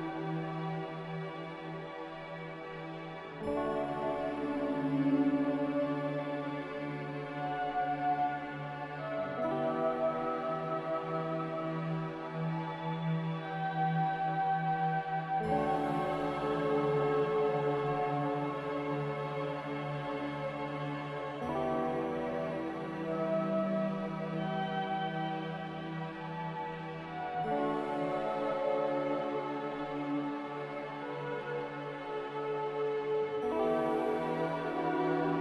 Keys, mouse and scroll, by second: 5.7 v, 28.9 z, 30.3 z.